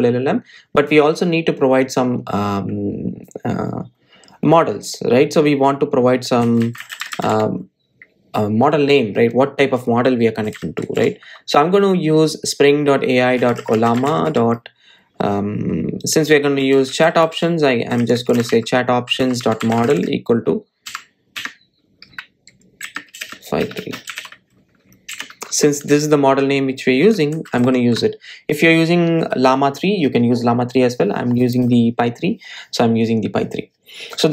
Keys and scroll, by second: 28.3 super+s.